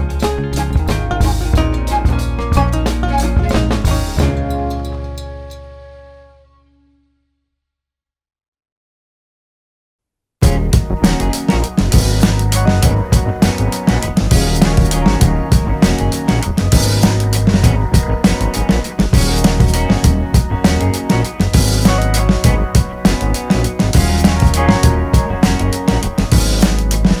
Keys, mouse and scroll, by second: 0.0 click, 0.4 shift+middle click, 1.0 click, 1.7-3.7 middle drag, 3.7 click, 4.3 click, 4.7 click, 5.1 middle click, 5.8 click, 6.2 middle click, 6.5 click, 6.7-8.0 middle drag, 8.0 click, 8.5-9.6 middle drag, 9.6 click, 10.0 shift+middle click, 10.5 scroll down 1, 10.7-12.0 middle drag, 12.0-13.0 drag, 13.0 shift+middle click, 13.7 click, 14.5 shift+middle click, 15.1-16.9 drag, 16.9 middle click, 17.4 click, 18.2 middle click, 18.7-20.4 drag, 20.4 middle click, 20.8 click, 21.6 middle click, 22.0 click, 22.3 middle click, 22.9 shift+click, 23.1 middle click, 23.6 click, 24.3 middle click, 24.6 shift+click, 24.7 middle click, 24.8 scroll down 2, 25.0 middle click, 25.6 click, 25.9 middle click, 26.4-27.2 drag.